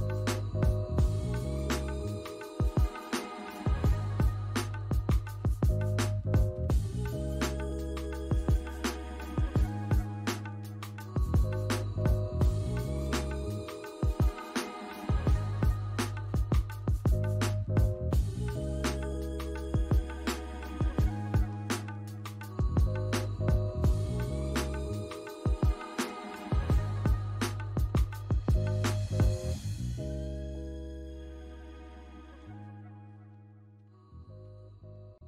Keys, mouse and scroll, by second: 0.1 Escape, 0.2 scroll down 1, 0.6 alt+middle click, 0.9 alt+click, 1.3 alt+middle click, 3.7 Escape, 6.6 Escape, 7.1 alt+middle click, 12.2 Escape, 15.5 alt+middle click, 16.6 Escape, 16.7 alt+middle click, 16.8 Escape, 17.0 Escape, 17.6 Escape, 18.1 alt+middle click, 18.3 Escape, 20.1 Escape, 20.5 alt+click, 20.9 alt+middle click, 21.2 scroll up 1, 21.7 alt+click, 24.0 Escape, 24.3 scroll down 1, 24.7 alt+click, 26.4 alt+middle click, 26.7 alt+click, 28.3 scroll up 1, 28.9 alt+click, 31.2 shift+click, 31.6 alt+middle click, 31.7 alt+scroll up 1, 32.7 shift+click, 33.4 alt+middle click, 33.4 shift+click, 33.6 shift+click, 33.7 ctrl+z, 34.0 alt+middle click, 34.0 shift+click, 34.1 scroll up 1, 34.2 shift+click, 34.3 ctrl+z, 34.4 shift+click, 34.7 ctrl+z, 34.8 alt+middle click, 35.0 scroll up 1, 35.0 shift+click, 35.1 ctrl+z.